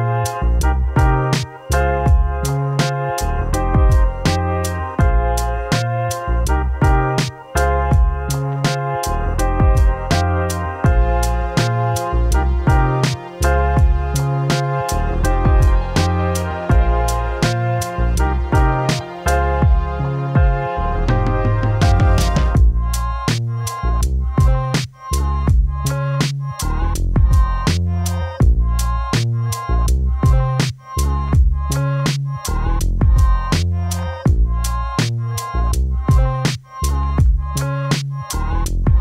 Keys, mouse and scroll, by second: 9.1 typing, 9.3 Return, 19.7 click, 24.2 click, 26.1-27.6 typing, 28.4-32.2 drag, 35.2-39.0 drag.